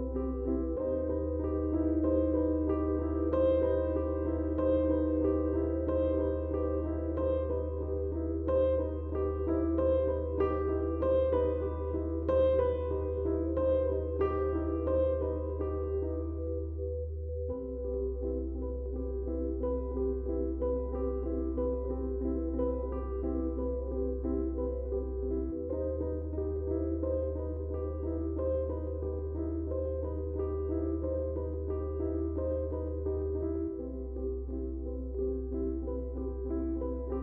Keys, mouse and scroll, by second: 0.9-6.2 drag, 15.0 click, 19.3 click, 22.3 click, 27.9 click, 30.4-31.6 typing, 30.5 click, 31.6-37.2 ctrl+drag.